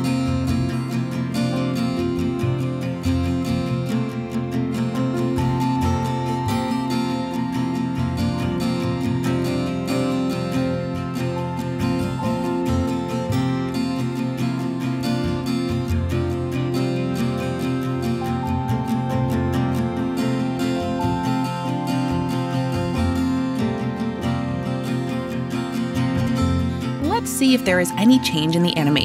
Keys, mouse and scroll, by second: 3.2 click, 8.1 click, 10.4 click, 12.4 click, 14.6 click, 15.4 w, 16.8 s, 18.0 s, 18.3-19.3 a, 23.7 click, 24.1 click, 27.0 click, 27.2 click.